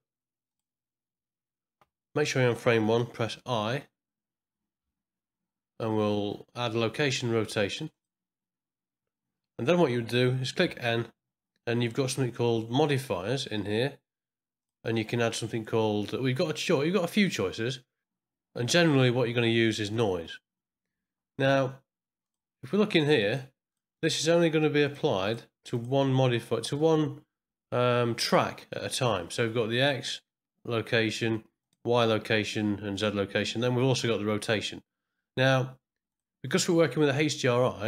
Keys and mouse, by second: 0.5 click, 3.2 i, 4.8 i, 10.6 n, 12.8 click, 14.7-19.9 drag, 22.2 click, 23.3 click, 23.7 click, 23.9 click, 24.8 click, 25.2 click, 25.7 click, 29.7 click, 31.6 click, 32.9 click, 36.1 click.